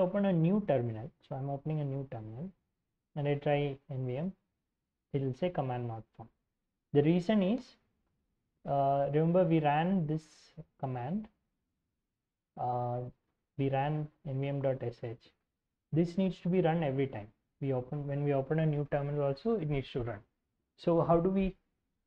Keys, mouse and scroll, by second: 0.6 ctrl+n, 2.3-5.0 typing, 6.6-8.5 typing, 8.8 scroll down 2, 8.9 scroll up 1, 9.2-9.5 scroll down 2, 9.5-12.0 scroll up 4, 13.3-18.2 drag.